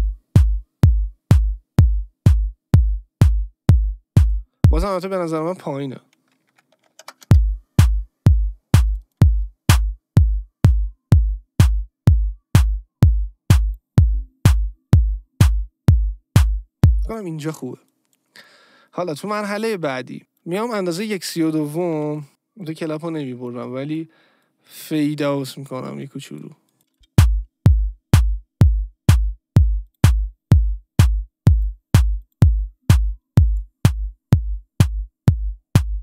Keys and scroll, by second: 4.7 space, 6.5 -, 6.7 1, 7.0 Return, 7.2 space, 17.0 space, 21.9 Delete, 26.9 space.